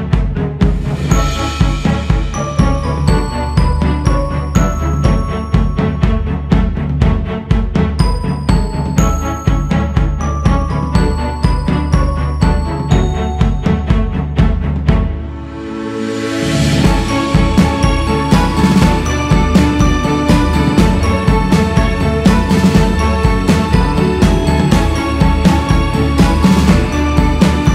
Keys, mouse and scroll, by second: 0.7 f, 3.4-6.5 drag.